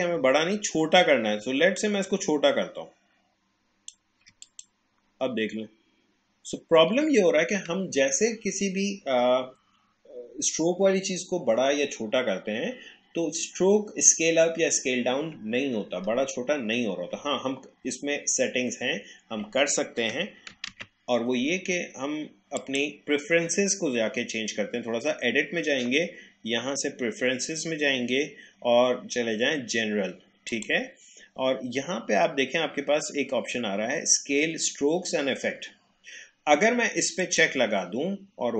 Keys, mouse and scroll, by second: 0.6 alt+scroll up 1, 1.8 alt+shift+click, 5.2 alt+scroll down 1, 6.0-6.5 alt+scroll up 1, 20.7 ctrl+z, 22.6 click, 30.5 click, 37.2 click.